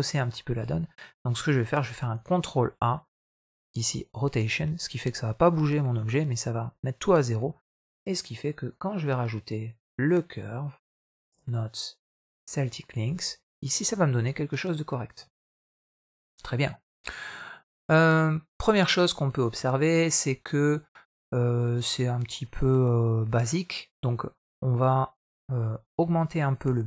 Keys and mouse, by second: 0.6 middle click, 1.8 ctrl+a, 7.1 middle click, 8.5-12.8 drag, 13.6 middle click, 14.2 middle click, 15.1 middle click, 15.9-17.0 middle drag, 19.4-19.8 middle drag, 20.2 middle click, 21.1 middle click, 22.5 middle click, 26.2-26.8 shift+drag.